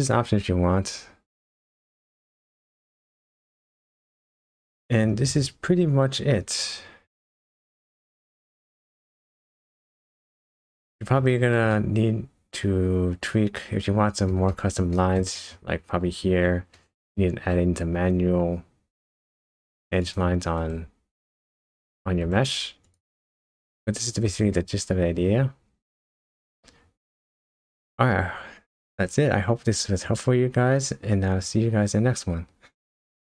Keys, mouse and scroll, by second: 3.4 click, 5.2-5.7 scroll down 4, 7.2 shift+middle click, 9.6-10.2 scroll up 4, 10.4 shift+middle click, 11.7 middle click, 14.5 shift+middle click, 14.9 shift+middle click, 15.4 middle click, 16.7 middle click, 17.5 scroll up 2, 19.6 scroll down 1, 20.0 click, 20.6 Tab, 22.2 Tab, 22.8 click, 23.6 shift+middle click, 24.5 middle click, 25.3 scroll up 1, 25.6 scroll down 4, 25.9 shift+middle click, 25.9 scroll up 2.